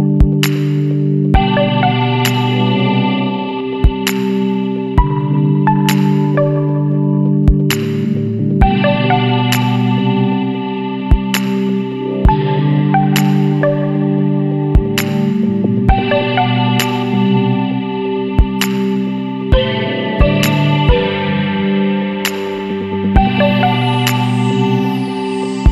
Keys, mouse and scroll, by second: 0.5 ctrl+click, 2.6 click, 4.5 click, 7.1 click, 8.9 click, 10.1-12.2 drag, 12.5 click, 13.2 click, 15.7-19.3 drag, 21.3 click, 22.0 click, 23.4-23.7 scroll up 2, 24.0 scroll down 2.